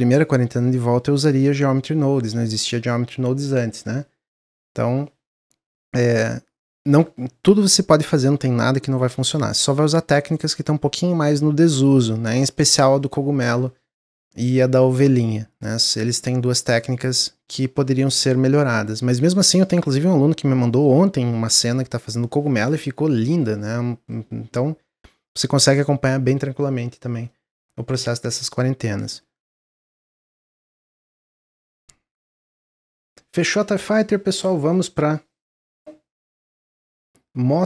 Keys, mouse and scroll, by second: 22.3-29.0 middle drag, 29.0 click, 29.7 shift+click, 30.4 click, 31.4 drag, 31.7-35.5 middle drag.